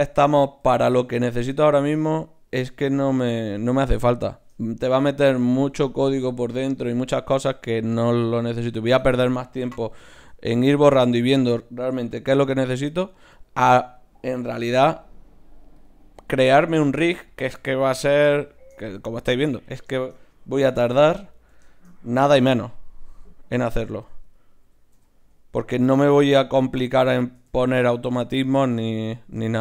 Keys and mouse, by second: 0.6 g, 4.8-8.2 right drag, 10.3 Tab, 11.3-13.4 right drag, 12.8 w, 13.8-15.5 drag, 14.6 g, 16.2 g, 16.9 g, 17.7 KP_1, 18.4-21.7 drag, 20.5 KP_3, 23.1 e, 24.6 e, 26.6 KP_1, 27.2-29.6 middle drag.